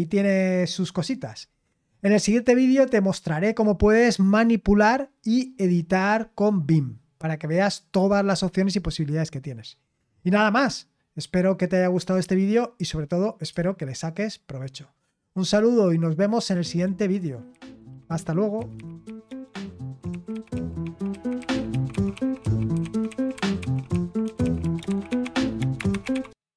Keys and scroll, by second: 16.4 super+x.